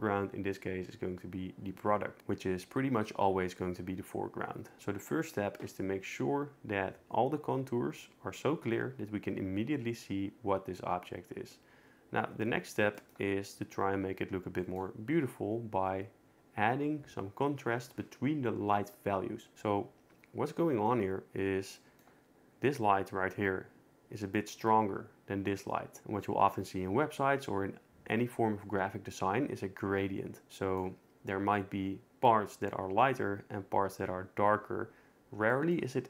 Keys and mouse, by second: 12.9 shift+middle click, 14.6 shift+middle drag.